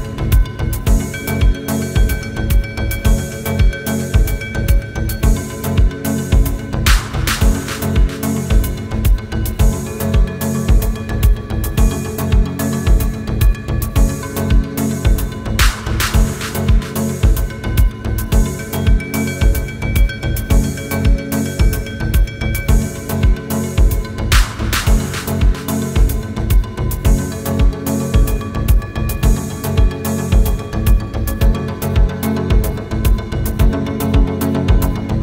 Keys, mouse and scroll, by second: 0.3 Return, 1.0 typing, 2.1-2.7 scroll down 1, 2.7 typing, 4.7 scroll up 1, 5.0 scroll down 1, 5.4 typing, 7.4 scroll down 1, 7.7 scroll up 1, 8.1 scroll down 1, 8.4-8.9 scroll up 1, 8.9 t, 10.2 typing, 10.2 Return, 10.6-11.0 scroll down 1, 11.1-12.1 scroll up 1, 12.1 typing, 12.4 Return, 12.7-13.5 scroll down 1, 13.9 scroll down 1, 14.0-15.2 scroll up 1, 15.2-15.5 scroll down 1, 16.9-19.2 typing, 18.1-18.8 scroll down 2, 18.8-19.2 scroll up 1, 20.0 scroll down 1, 20.3 middle click, 20.6 scroll down 1, 21.2 scroll down 1, 21.4 scroll up 1, 21.7-22.3 typing, 24.4 Return, 24.7 scroll down 1, 24.9 space, 25.5 double click, 25.7 right click, 26.7 typing, 29.3 Return, 30.0 middle click, 30.7 scroll down 1, 30.9 middle click, 31.3 scroll up 1, 32.1 r.